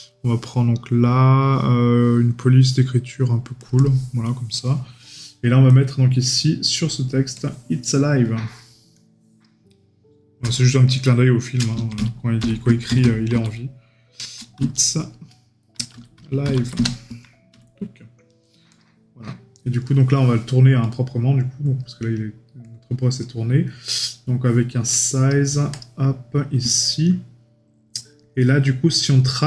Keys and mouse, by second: 19.8 right click, 26.9 right click.